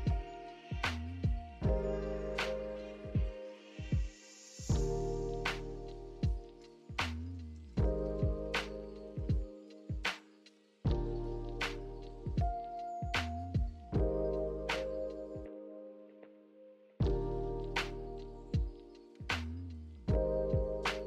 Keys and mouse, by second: 0.8 shift+click, 1.1 shift+click, 1.8 shift+click, 2.5 alt+z, 2.5 click, 3.9 shift+click, 4.7 click, 4.9 ctrl+shift+s, 5.7 Tab, 6.3 a, 7.5 click, 7.8-8.4 drag, 9.8-10.6 drag, 11.5 alt+z, 12.1 click, 12.3 alt+z, 12.6 click, 15.0 i, 16.9-18.1 drag, 18.1 e.